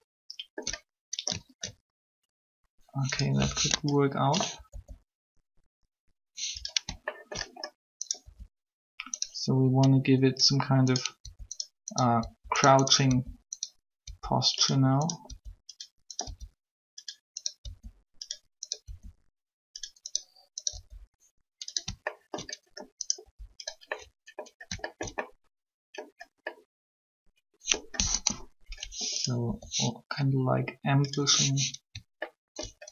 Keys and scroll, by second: 4.7 ctrl+r, 8.2 alt+shift+r, 11.2 r, 12.2 r, 15.3 r, 16.2 r, 17.7 r, 18.8 r, 20.7 r, 23.2 alt+shift+r, 28.1 3, 29.4 r.